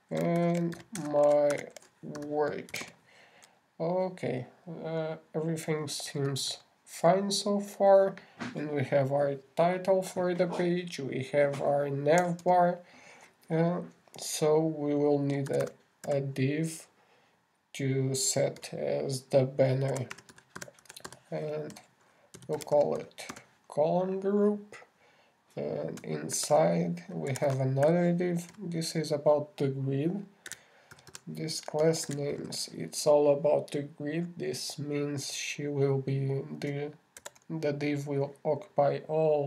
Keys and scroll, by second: 1.8-3.6 typing, 27.7 shift+,, 28.7 shift+d, 38.6 shift+,.